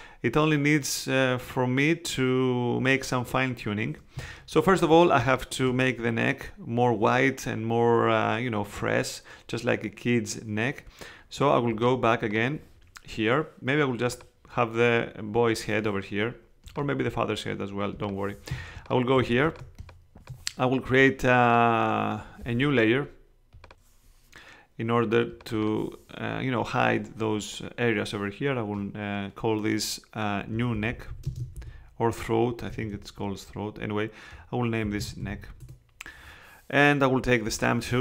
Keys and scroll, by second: 4.1 space, 18.5 space, 30.5-32.9 typing, 34.6-35.8 typing.